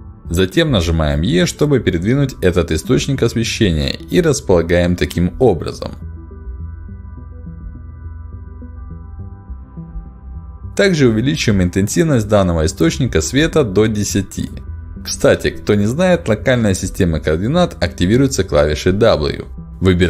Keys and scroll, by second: 0.8 e, 13.2 0, 13.3 Return, 17.1 r.